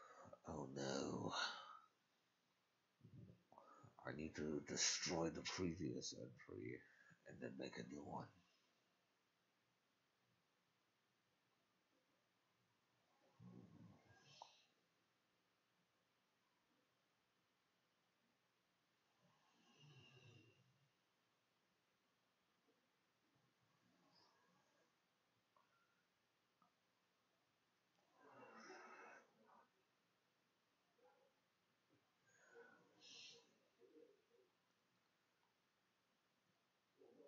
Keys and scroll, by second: 15.4 Escape, 15.5 Tab, 20.5 ctrl+`, 20.6 ctrl+q.